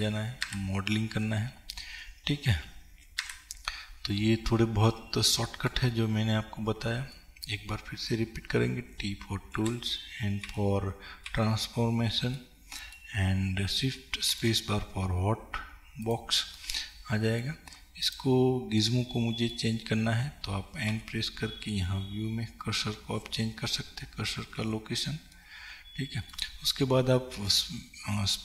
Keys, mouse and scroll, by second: 0.0 ctrl+Page_Up, 0.0-16.1 middle drag, 6.1-7.3 scroll up 2, 9.0 t, 10.4 n, 16.1 click, 16.6-18.1 middle drag, 18.1 click, 19.0-28.4 middle drag, 21.0 n.